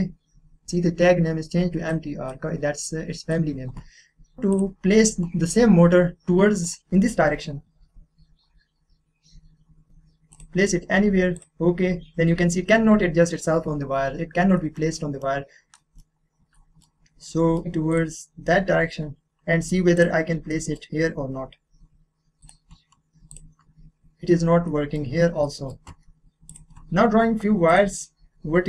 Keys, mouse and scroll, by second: 1.9-4.4 drag, 4.4 middle click, 4.5 click, 6.6 click, 6.8-8.4 scroll up 1, 10.3 click, 13.8-14.6 scroll down 1, 14.6 middle click, 15.4-15.7 scroll down 1, 15.7 middle click, 16.2-16.5 scroll down 1, 16.5-17.9 middle drag, 17.9 click, 20.0 click, 20.5 middle click, 20.9 scroll up 1, 22.4 click, 24.3-24.6 scroll down 1, 24.6 middle click, 25.1 scroll down 1, 25.4 middle click, 26.5 click.